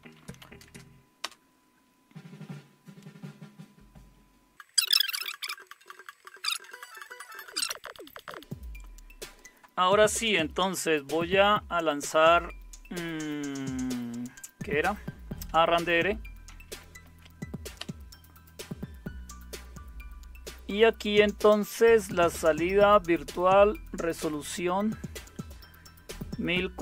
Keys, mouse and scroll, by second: 0.0-0.7 typing, 1.2 Return, 15.2-16.4 typing, 17.0 Tab, 17.8 Return.